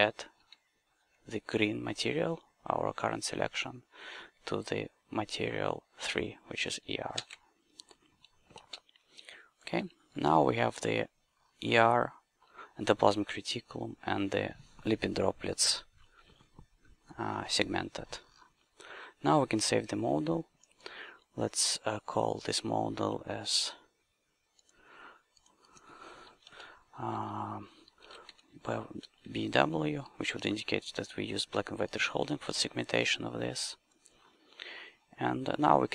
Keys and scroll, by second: 7.1 shift+a, 8.5 ctrl+space, 9.7 q, 28.0 shift+b, 28.2 shift+w.